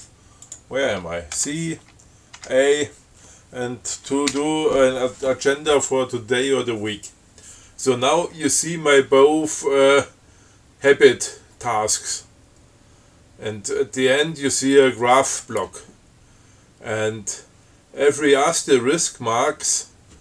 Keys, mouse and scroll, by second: 0.8 click, 1.6 ctrl+c, 2.6 ctrl+a, 4.6 a.